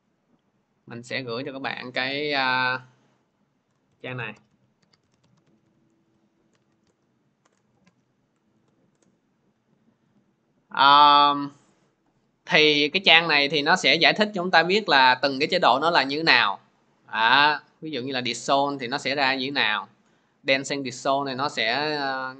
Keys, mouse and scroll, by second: 1.8 alt+Tab, 3.7-6.0 typing, 7.3 BackSpace, 12.0 Return, 12.0 click, 12.5-13.7 scroll, 15.2-15.9 scroll, 15.9-16.4 scroll, 16.5-16.9 scroll, 18.5 scroll, 19.6 scroll, 20.9-21.6 scroll.